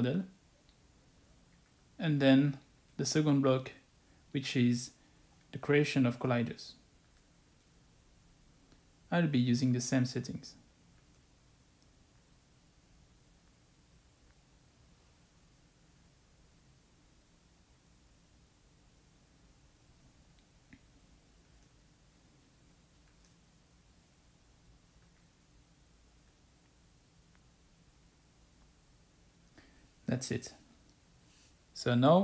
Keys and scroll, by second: 10.7 typing, 14.5-18.0 typing, 18.7 Return, 22.5 ctrl+a, 22.9-25.4 typing.